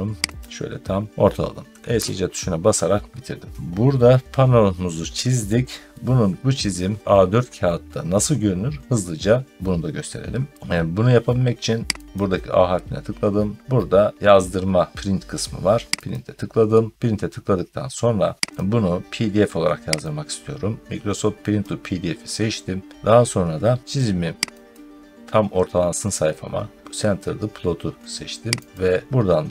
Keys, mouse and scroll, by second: 0.2 click, 1.8 Escape, 2.4 middle click, 2.5 middle click, 2.6-3.2 scroll down 3, 3.2-4.2 scroll up 2, 12.0 click, 16.0 click, 18.5 click, 21.4 click, 24.6 click, 28.6 click.